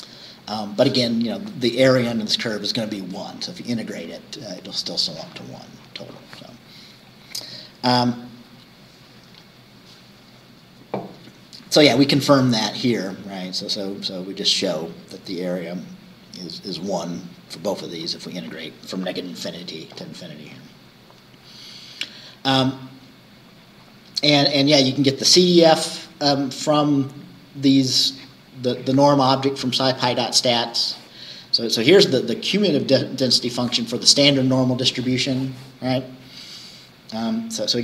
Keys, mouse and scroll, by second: 7.1-7.5 scroll down 2, 20.5-20.8 scroll up 2, 21.5 scroll down 2, 30.2 scroll down 2, 31.5-31.9 scroll down 2.